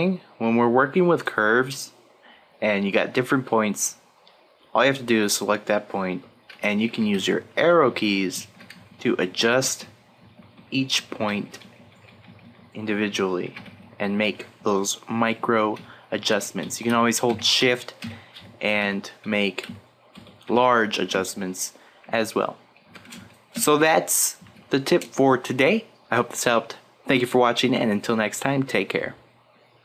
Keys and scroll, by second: 6.6 Right, 7.6 Down, 8.7 Right, 11.2 Down, 13.5 Right, 14.3 Down, 15.7 shift+Up, 16.3 shift+Down, 16.6 shift+Left, 16.9 shift+Up, 17.6 shift+Left, 18.0 shift+Up, 18.3 shift+Left, 18.7 shift+Down, 19.6 shift+Right, 20.1 shift+Left, 21.1 shift+Right, 22.1 shift+Up, 22.8 shift+Down, 23.1 Right, 23.8 shift+Right.